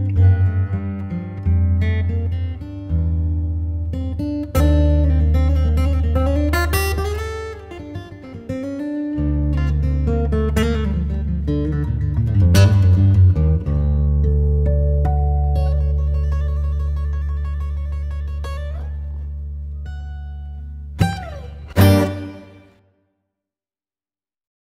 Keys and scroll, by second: 0.3 shift+f, 1.2 ctrl+space, 10.8 ctrl+k, 13.1 c, 17.0 F4, 18.7 c, 19.4 Escape, 19.9 F3, 20.1 Escape, 22.1 shift+F2, 22.7 F9.